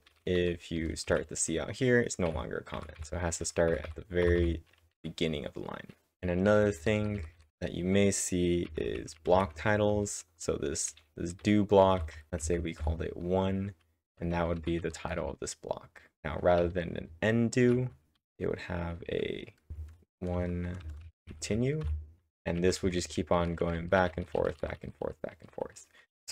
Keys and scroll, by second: 0.8 Return, 1.1 c, 6.4-7.0 typing, 8.9-12.4 typing, 14.1-15.7 typing, 19.7-26.3 typing.